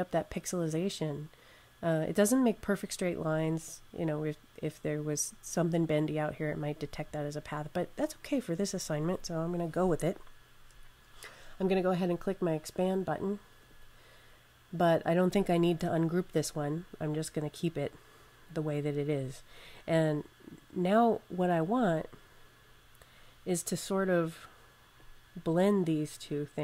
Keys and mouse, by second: 13.4 click, 18.4 click, 21.1 click.